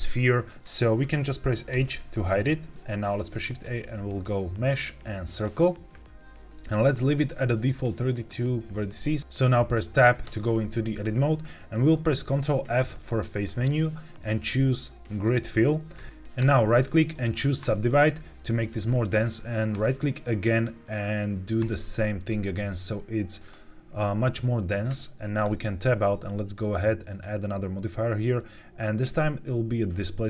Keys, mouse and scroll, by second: 1.6 h, 2.6-3.1 middle drag, 3.1 shift+a, 9.2 Tab, 10.2 Tab, 12.7 ctrl+f, 16.0 q, 16.6-17.6 right drag, 19.6-21.6 right drag, 25.4 Tab, 27.0-29.9 drag.